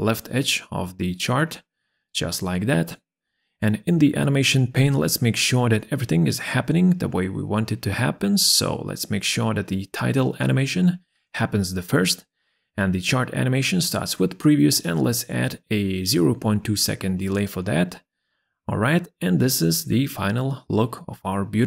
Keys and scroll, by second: 15.3 ,, 15.9 2, 15.9 Return.